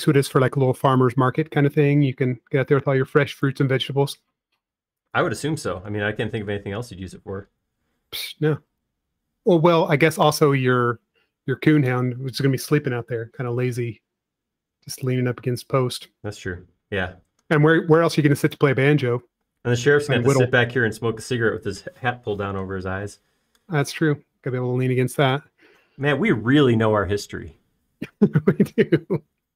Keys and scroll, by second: 0.9 space, 3.5 b, 11.5 space.